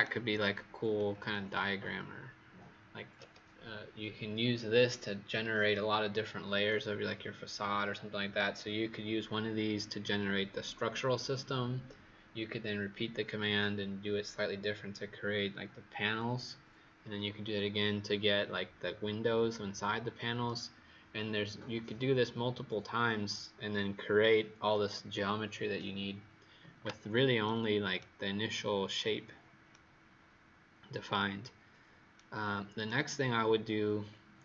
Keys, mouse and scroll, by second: 33.4-33.9 scroll up 1, 33.9-34.4 scroll up 2.